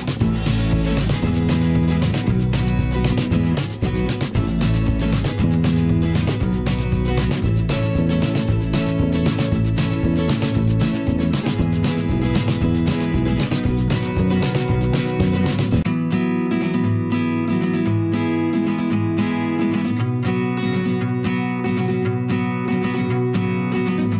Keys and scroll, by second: 2.4 Return, 2.7 ctrl+shift+[, 7.0 i, 7.3 v, 8.3 ctrl+z, 8.8-11.6 typing, 12.2 ctrl+shift+], 15.4 p, 19.3 v, 19.3 a, 23.1 v, 23.9 i.